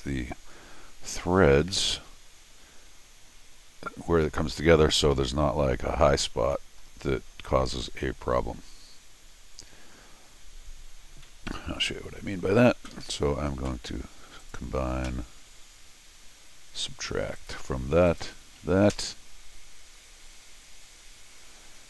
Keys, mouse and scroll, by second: 4.2 middle click, 5.1 middle click, 5.8 scroll up 1, 6.5 middle click, 8.4 middle click, 11.2-12.3 middle drag, 12.9 Escape, 14.4 click, 17.4 click, 18.1 click.